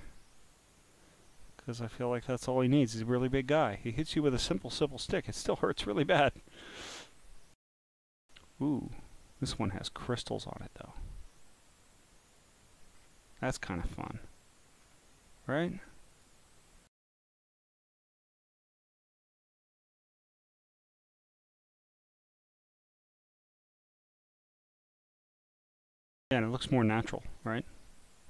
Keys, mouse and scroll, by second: 0.3-1.4 scroll up 5, 1.4 scroll, 2.0 scroll, 2.5 scroll, 3.4-3.8 scroll, 4.8 click, 5.7-6.6 scroll down 1, 6.6-7.2 scroll down 3, 7.8 scroll up 2, 8.8 click, 9.4-12.4 drag, 12.9 scroll down 1, 13.6-14.3 scroll down 3, 14.8 scroll up 5, 16.1 click, 17.2 click, 18.2 scroll, 18.9 scroll, 19.9 click, 21.3 scroll down 3, 23.1 click, 23.8 click, 25.6 click, 27.4 click.